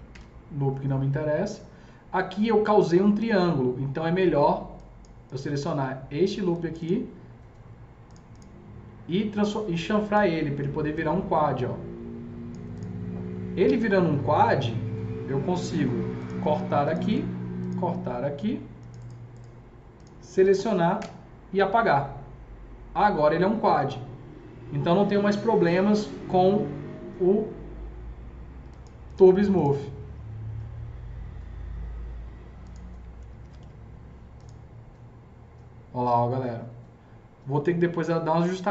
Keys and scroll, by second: 0.1 ctrl+BackSpace, 15.5 alt+c, 20.9 ctrl+BackSpace, 33.2 F3, 33.3 F3, 33.5 F4.